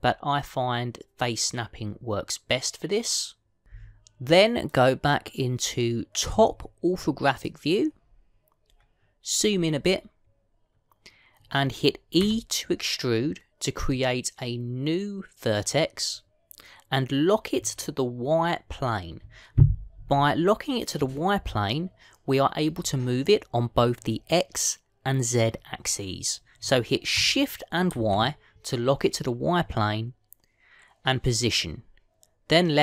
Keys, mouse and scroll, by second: 8.3 click, 9.5-11.3 scroll up 5, 13.1 e.